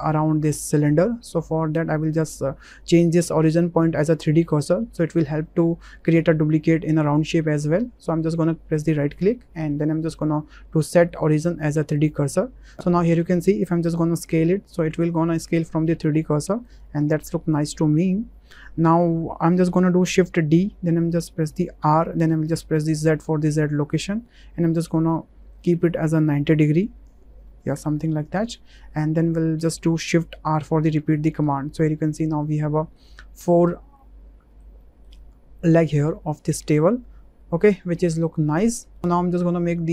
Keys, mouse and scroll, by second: 9.0-12.7 drag, 14.3 s, 16.6 right click, 20.5 shift+d, 21.8 r, 23.0 z, 25.6 ctrl+click, 26.7-29.4 drag, 30.6 shift+r, 31.2 shift+r, 31.6-31.9 drag, 32.1-32.6 middle drag, 32.8 shift+middle drag, 33.2-33.7 middle drag, 34.0-35.0 middle drag, 36.0 middle click, 36.6 shift+middle drag, 36.8-38.7 drag.